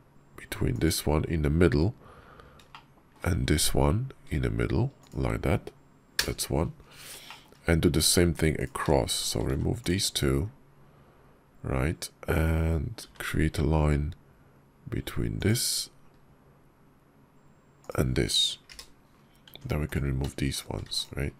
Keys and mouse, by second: 2.6-6.2 shift+middle drag, 7.1 shift+click, 7.9 Tab, 8.4 click, 9.0 shift+click, 9.3 x, 12.9 k, 19.3 Tab, 20.3 shift+click, 21.0 x.